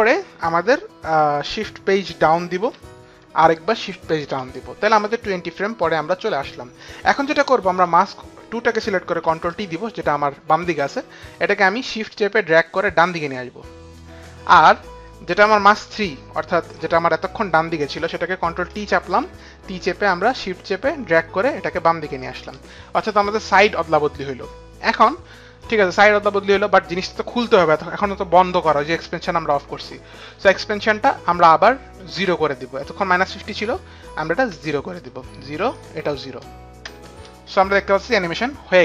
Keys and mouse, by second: 2.4 Return, 3.1 shift+Page_Down, 4.3 shift+Page_Down, 8.5 click, 9.7 ctrl+t, 11.8 click, 16.1 click, 16.8 click, 18.9 ctrl+t, 20.5 ctrl+shift+t, 20.5 shift+click, 34.0 click, 35.0 KP_0, 35.4 Return, 36.2 click, 37.5 Return, 37.5 click, 37.5 KP_0.